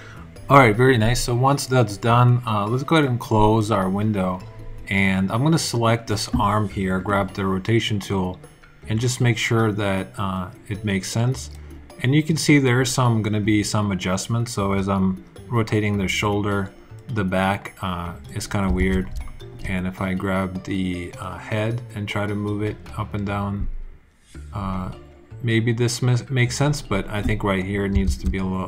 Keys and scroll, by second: 18.6 super+z, 27.9 super+z.